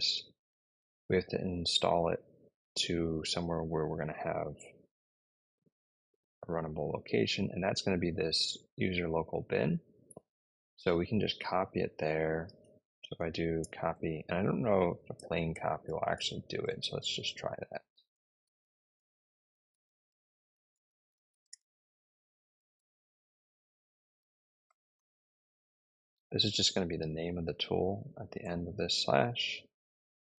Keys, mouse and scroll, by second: 8.3 click, 11.5 click, 13.2-16.5 typing, 17.8-23.0 typing, 24.5-25.9 typing, 28.2 Return, 30.0-30.3 typing.